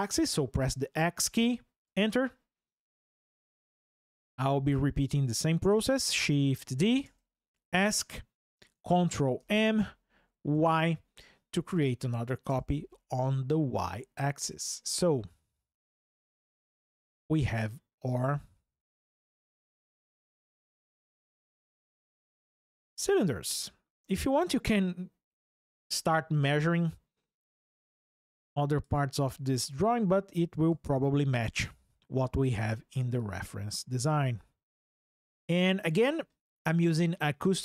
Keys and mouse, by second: 1.6 Return, 3.2 shift+click, 6.0 shift+d, 6.8 Escape, 9.2 ctrl+m, 10.3 y, 12.2 Return, 21.3 shift+click, 21.4 shift+middle click, 22.3 click, 27.5 ctrl+click, 31.4 click, 34.6 ctrl+click.